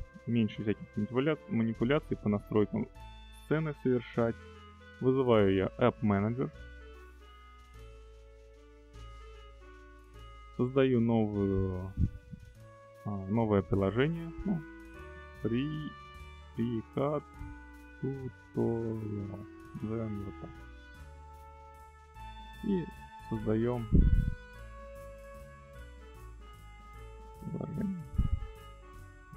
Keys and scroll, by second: 14.8 f, 15.9-19.7 typing.